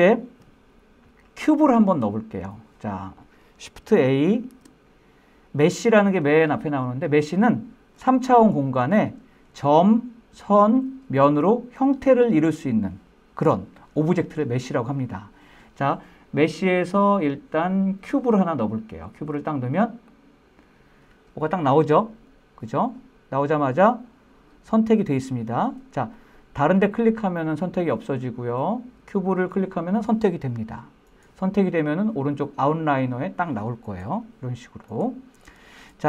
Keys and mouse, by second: 5.9 shift+a, 23.2-24.3 middle drag, 25.1-26.7 middle drag, 27.1 click, 28.2 click, 31.0-36.0 drag.